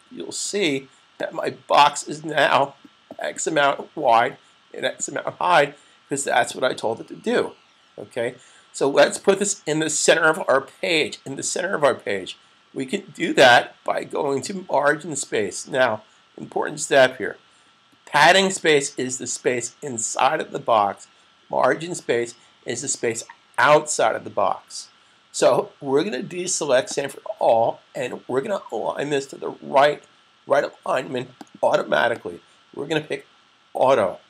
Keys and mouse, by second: 0.2 typing, 26.5 click, 31.1 click.